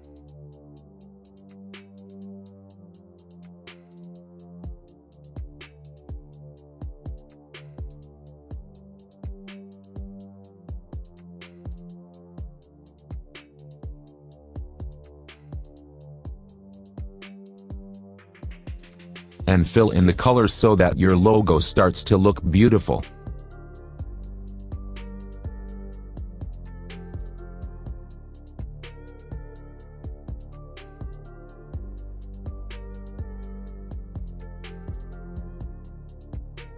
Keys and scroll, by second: 10.1 shift+F2, 10.4 Escape, 14.4 ctrl+z.